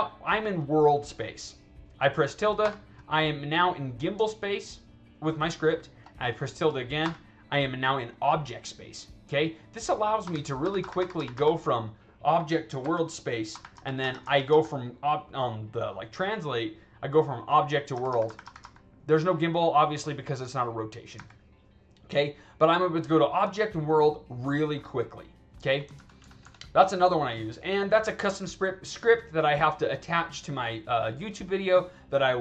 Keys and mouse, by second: 4.3-5.9 alt+drag, 12.7 w, 25.8 ctrl+z, 26.1 ctrl+z, 27.8-29.4 drag.